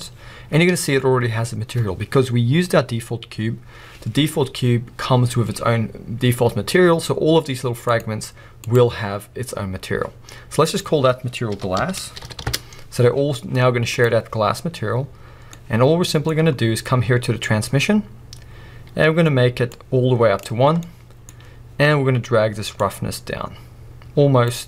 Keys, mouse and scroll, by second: 8.0 click, 12.5-14.0 drag, 12.5 s, 12.6 Return, 19.8-22.1 drag, 22.1-22.9 middle drag, 22.1-22.9 scroll up 2, 22.9-24.6 drag.